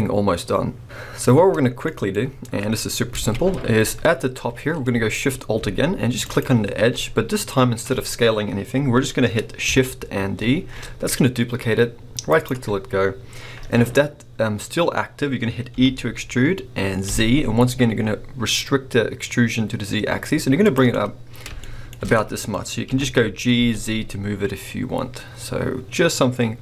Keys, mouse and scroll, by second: 1.8 middle click, 2.1 scroll up 1, 3.1 alt+a, 3.6-4.6 scroll down 2, 4.6 scroll up 2, 6.3 alt+shift+click, 10.4 shift+d, 12.5 right click, 13.2-14.8 scroll down 1, 15.8 e, 20.7 click, 20.9-22.6 middle drag, 22.6 scroll up 2, 22.9 g.